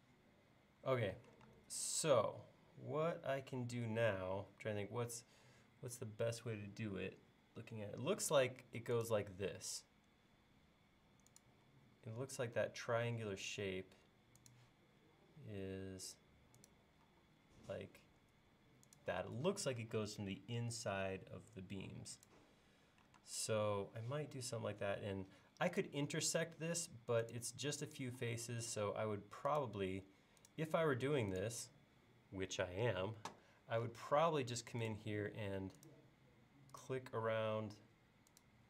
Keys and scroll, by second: 1.5 space, 7.9 l, 11.7 l, 17.1 l, 23.2 space, 23.9 l, 28.2 l, 32.6 l, 35.3 l.